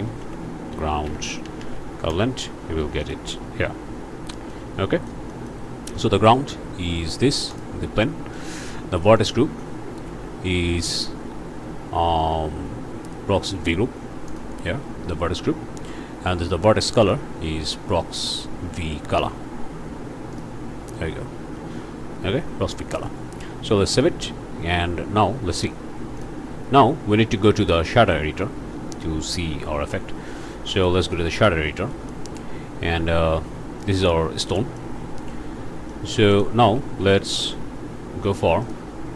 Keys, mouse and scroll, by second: 0.0 g, 0.2 r, 0.4 o, 0.7 u, 1.4 Down, 2.1 Return, 3.0 click, 3.4 scroll up 2, 4.5-5.7 drag, 6.2 click, 7.5 click, 8.3 click, 9.2 click, 14.3 click, 17.0 click, 20.3 click, 22.7 scroll down 2, 23.0 click, 23.9 ctrl+s, 26.2 click, 28.0 click, 29.3 click, 31.4 click, 31.9 middle click, 32.3 scroll down 1, 33.0 scroll down 1, 33.8 click, 34.6 middle click, 34.9-35.3 scroll up 1, 35.9 click, 36.3 shift+click, 36.8 shift+a, 38.6 click.